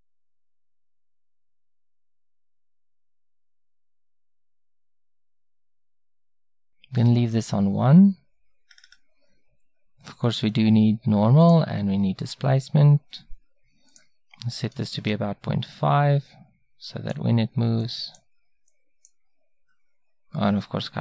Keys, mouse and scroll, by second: 3.2-7.6 drag, 10.3-16.1 drag, 16.9-21.0 drag.